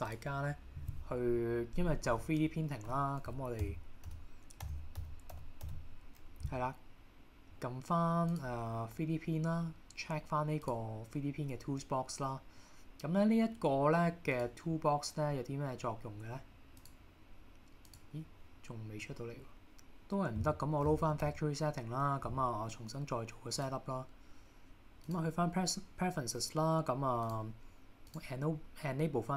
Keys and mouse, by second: 14.4 click, 16.9-18.2 drag.